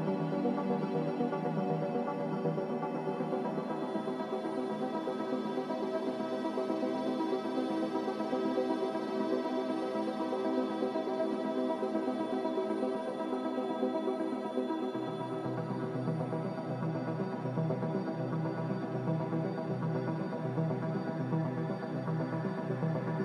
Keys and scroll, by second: 6.0 m, 10.5 v, 10.9 b, 15.1 a.